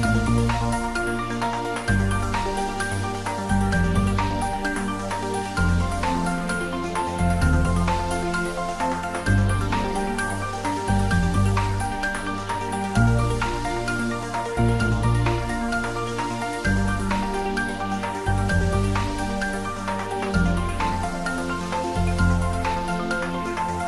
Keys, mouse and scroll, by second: 0.4 Tab, 1.1 Tab, 1.5 ctrl+r, 2.0 click, 3.0 ctrl+r, 3.5 click, 4.0 ctrl+z, 4.4 ctrl+r, 4.9 click, 6.0 Tab, 6.3 scroll down 1, 6.6 middle click, 7.0 click, 9.0 shift+click, 9.6 ctrl+j, 10.7 shift+click, 10.8-11.3 scroll down 1, 11.5 alt+h, 12.2-12.6 scroll down 1, 12.8 click, 13.6 scroll up 1, 14.0 click, 14.7 shift+click, 15.3 s, 15.9 click, 17.7 g, 19.4 click, 19.9 3, 20.5 scroll down 1, 20.9 s, 22.4 s, 22.4 click.